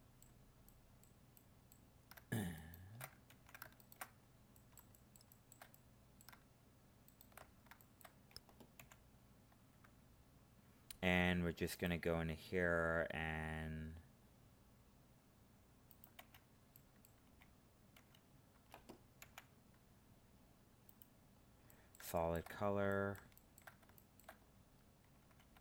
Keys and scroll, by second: 3.3 ctrl+z.